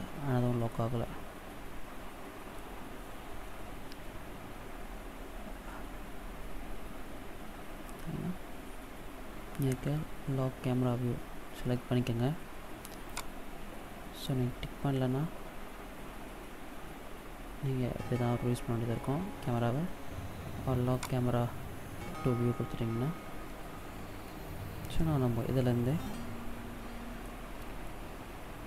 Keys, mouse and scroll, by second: 0.5 middle click, 3.3 n, 4.2-6.5 scroll down 12, 6.5-6.8 scroll down 3, 7.2-8.3 scroll up 10, 8.8-10.0 scroll up 5, 12.9 click, 14.4-14.9 scroll down 2, 14.9-15.3 scroll up 2, 15.4-15.7 scroll down 2, 15.9-16.3 scroll up 2, 16.5 scroll down 1, 17.2-17.7 scroll up 2, 20.9 click, 23.3 n, 24.0 middle click, 27.7 shift+middle click.